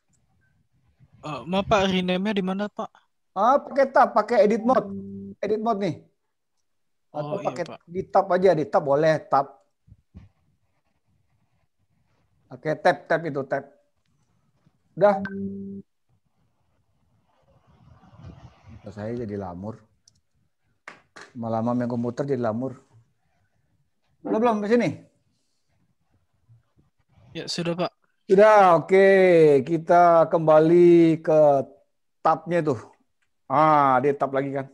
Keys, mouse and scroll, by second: 4.8 click, 31.0 middle click, 33.4 Tab.